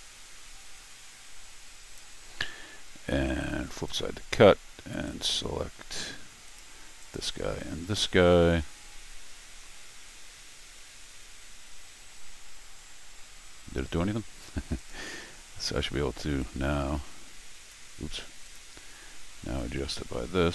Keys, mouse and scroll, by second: 3.9 click, 5.1 click, 6.4 click, 7.0 click, 7.8-8.4 scroll up 4, 10.1-20.5 right drag, 13.4 middle click, 14.8 click, 16.4-17.7 drag, 18.4 click, 19.6-20.5 drag.